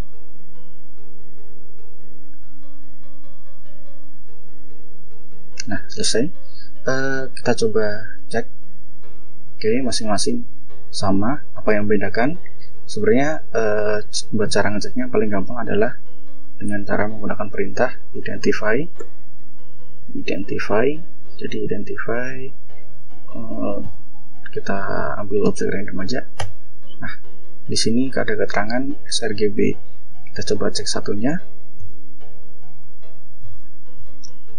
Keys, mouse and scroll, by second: 7.2 click, 9.2 click, 9.9 click, 11.3 click, 12.4 F4, 13.2 click, 14.2 ctrl+l, 16.2-16.9 ctrl+scroll up 4, 17.2 ctrl+scroll up 2, 17.9-20.5 typing, 22.6 ctrl+l, 23.6 ctrl+space, 24.1 ctrl+Tab, 25.2 Return, 26.1 Return, 28.4 click, 30.4 click, 31.2 click, 31.5 click, 32.3 click, 33.2 ctrl+l, 33.7 ctrl+i, 33.9 ctrl+d, 34.0 ctrl+e, 34.1 ctrl+n.